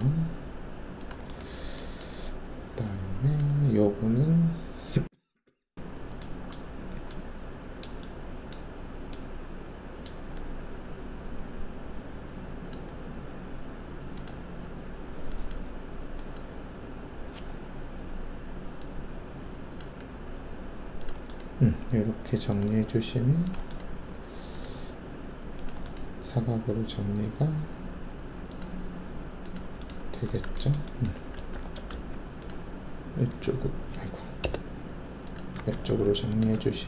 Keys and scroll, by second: 30.2 w, 31.5 alt+2, 31.9 alt+s, 34.4 BackSpace, 35.5 w, 35.8 alt+2, 36.5 alt+q.